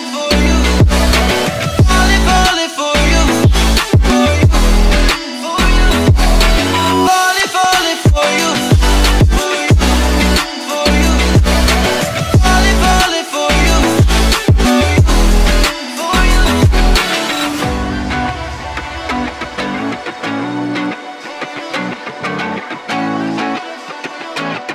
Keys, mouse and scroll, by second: 2.0 click, 3.8 click, 4.2 scroll up 1, 7.4 scroll up 1, 7.6 click, 9.1 click, 9.2 click, 10.2-10.9 ctrl+scroll up 1, 11.4 ctrl+shift+Num_Lock, 11.4-11.7 ctrl+scroll up 1, 11.8 ctrl+alt+shift+e, 13.0 click, 13.5-16.2 drag, 18.0-19.3 drag, 20.9-21.5 drag.